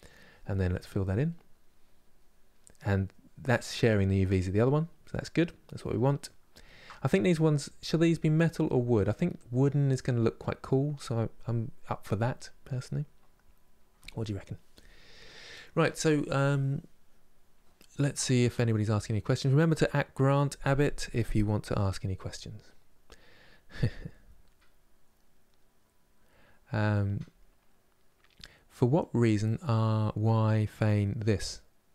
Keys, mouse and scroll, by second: 1.0-31.9 middle drag.